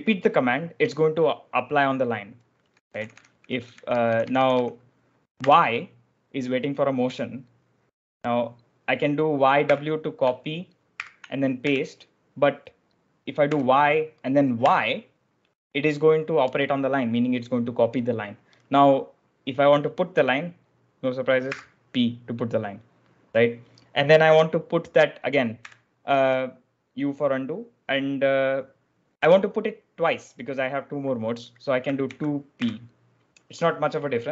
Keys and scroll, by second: 2.3-5.3 typing, 9.5 w, 10.9-12.0 typing, 13.3 y, 14.5 y, 21.4 p, 25.5 u, 31.9 2, 32.4 p.